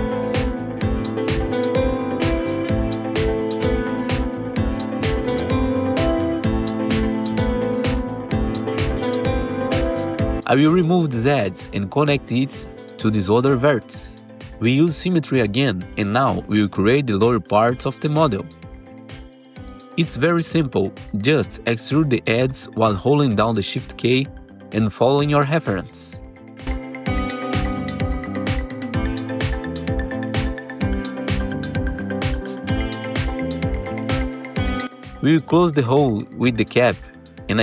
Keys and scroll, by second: 0.0 r, 1.6 w, 2.7 2, 3.7 r, 7.0 2, 7.9 w, 10.2 2, 13.8 ctrl+BackSpace, 14.4 1, 16.2 ctrl+shift+e, 20.1 ctrl+r, 20.5 ctrl+t, 21.2-23.9 typing, 27.1 alt+x, 27.9 r, 30.3 w, 32.5 r, 34.1 w, 34.8 alt+q, 36.8 1.